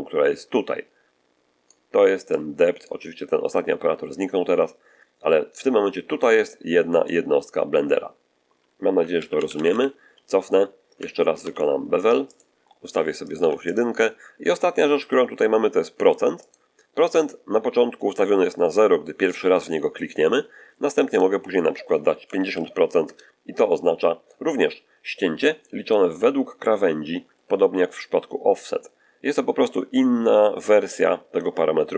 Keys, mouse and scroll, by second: 2.2 click, 6.0 d, 6.4 click, 6.5 d, 7.1 d, 9.0 ctrl+z, 9.2 ctrl+z, 9.4 ctrl+z, 11.3 ctrl+b, 12.2 ctrl+click, 13.1 click, 13.2 1, 13.6 click, 16.3 click, 21.0 click, 22.1 5, 22.4 0, 22.9 Return.